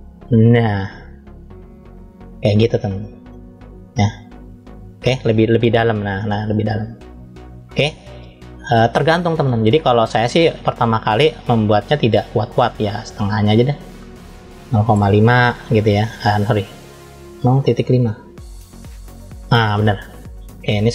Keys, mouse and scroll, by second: 3.1-4.5 middle drag, 4.7-5.3 scroll down 1, 5.3-6.8 middle drag, 8.5 click, 10.6-11.0 scroll up 1, 11.0-12.4 middle drag, 13.2-14.9 drag, 16.4-18.3 drag, 20.1-20.8 scroll up 1, 20.8 middle click.